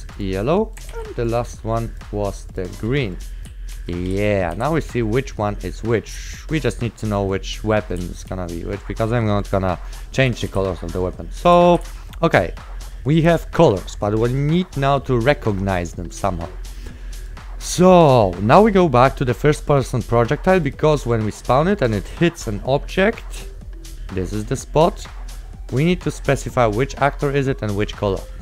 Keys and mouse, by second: 0.6 right click, 1.1 ctrl+w, 3.4-8.6 typing, 3.5 right click, 6.5 right click, 10.4-12.5 typing, 17.3 click, 20.7 click, 23.5 right click, 27.8 click, 28.2 right click.